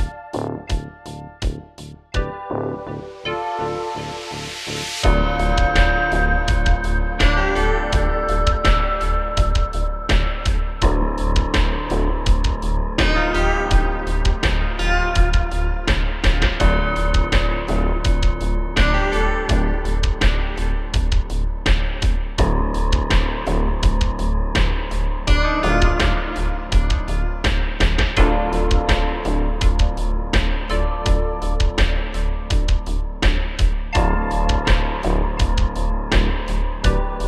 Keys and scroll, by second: 4.6 super+c, 5.4 super+v, 5.6 Return, 6.6 typing, 9.4 shift+f, 21.8 shift+f, 22.0 super+z, 22.3 super+z, 23.5 typing, 25.8 space, 26.4 super+z, 28.3-28.6 typing, 30.0-30.8 typing, 33.0 typing, 34.3-35.2 typing, 36.4 super+z, 36.5 super+z, 36.7 super+z, 37.0 space, 37.1 space.